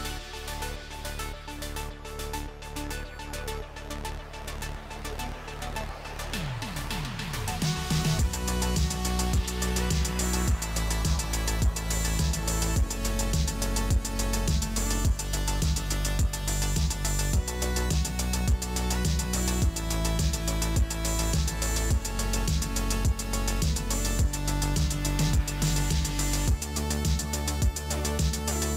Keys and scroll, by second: 1.1 space, 2.6 space, 7.4 ctrl+u, 11.2 space, 11.6 space, 13.3 space, 14.7 space, 22.6 ctrl+shift+], 24.7 space.